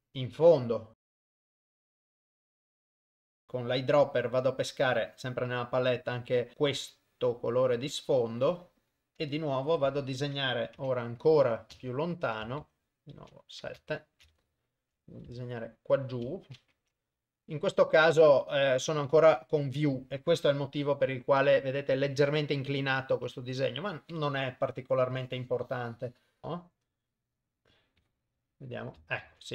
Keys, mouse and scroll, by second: 1.1 click, 1.6 click, 2.0 click, 2.7 click, 2.9 click, 3.2 click, 3.5 click, 8.0 click, 9.2 click, 10.9 KP_0, 11.7 ctrl+middle click, 12.1 ctrl+middle click, 13.3 KP_7, 14.0 ctrl+middle click, 14.4 shift+middle click, 15.7 shift+right click, 16.8 KP_0, 20.7 KP_0, 23.2 KP_0, 25.2 click, 26.4 middle click, 26.4 KP_0, 28.1 click, 29.4 ctrl+z.